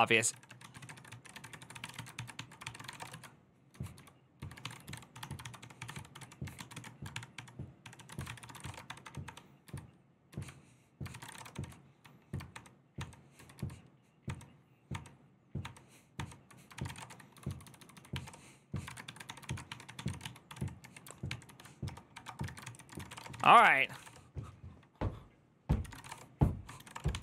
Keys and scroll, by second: 0.0-7.0 typing, 7.7 ctrl+n, 7.9 ctrl+y, 8.0-8.9 typing, 10.8-11.8 typing, 12.3 ctrl+d, 15.9 ctrl+d, 16.4-24.3 typing, 25.6 ctrl+c, 25.7-27.2 typing.